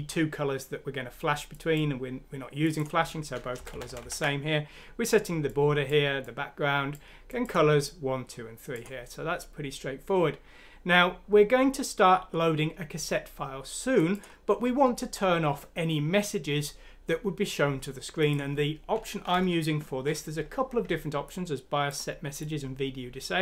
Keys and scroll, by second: 3.6 Left, 3.7 Left, 3.9 Left, 4.0 Left, 19.3 Home.